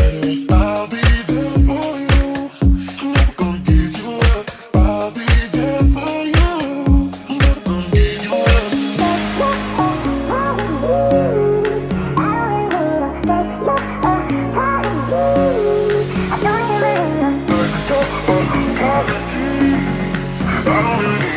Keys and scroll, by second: 0.0-3.1 typing, 16.9 Escape, 17.0-18.6 typing, 21.0-21.3 typing.